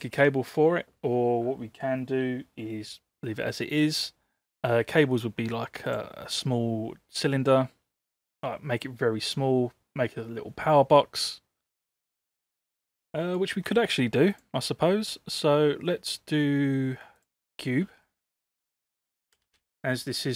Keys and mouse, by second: 6.0-8.2 drag, 12.3-13.3 middle drag, 14.4-17.2 drag, 18.2-18.6 middle drag, 19.3 space.